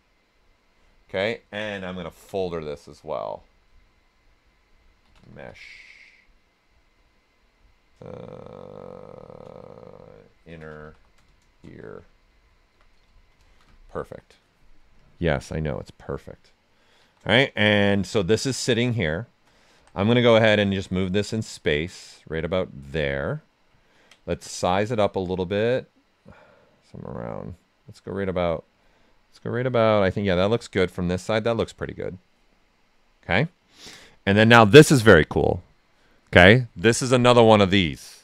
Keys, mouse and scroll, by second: 0.7 Return, 2.1 ctrl+f, 4.8-5.9 typing, 9.2-12.7 typing, 12.9 Return, 14.9-16.9 drag, 16.9 shift+m, 17.3-19.7 right drag, 19.7 w, 20.7-23.4 drag, 23.4 right click, 23.7 ctrl+right click, 24.5-28.9 drag, 28.9-30.7 right drag, 32.0 right click.